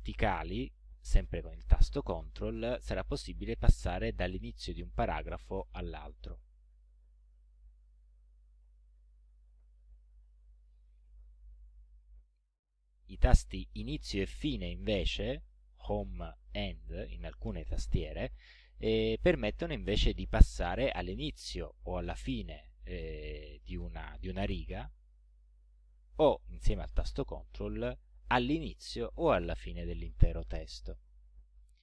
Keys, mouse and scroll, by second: 3.0 ctrl+Up, 4.3 ctrl+Up, 5.3 ctrl+Down, 6.4 ctrl+Down, 8.5 ctrl+Up, 9.8 ctrl+Down, 10.6 ctrl+Right, 20.9 Home, 22.1 End, 28.3 ctrl+Home.